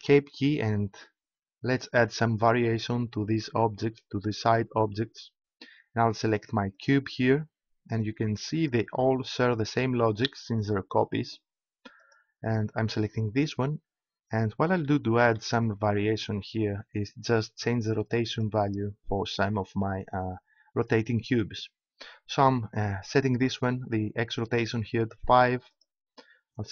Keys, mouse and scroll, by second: 2.0-3.7 drag, 6.8-14.1 right drag, 14.8-16.5 middle drag, 18.3 click, 19.2-20.5 middle drag, 25.7-26.7 right drag.